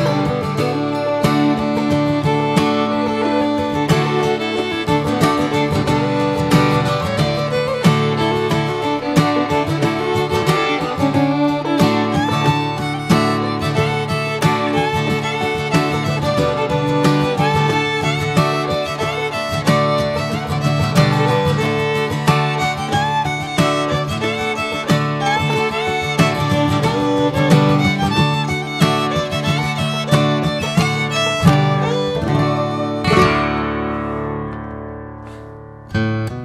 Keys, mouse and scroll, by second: 0.4 ctrl+drag, 1.9 ctrl+j, 3.0 ctrl+a, 3.6 alt+z, 4.1 drag, 4.6 drag, 5.2 shift+d, 6.1-7.0 shift+middle drag, 7.0 click, 9.0 s, 12.8-13.2 right drag, 13.2-13.5 shift+middle drag, 13.5 s, 14.8 click, 16.8 alt+middle click, 17.1 alt+middle click, 17.5 scroll up 2, 18.0-18.6 middle drag, 19.7 alt+middle click, 20.6-21.9 middle drag, 21.9 s, 23.4 click, 23.6 scroll down 3, 24.0-24.3 middle drag, 24.3 drag, 24.6 scroll up 1, 24.9 alt+middle click, 26.5 alt+middle drag, 27.3-28.4 shift+middle drag, 28.4 click, 29.3 click, 31.3 s, 35.0 click.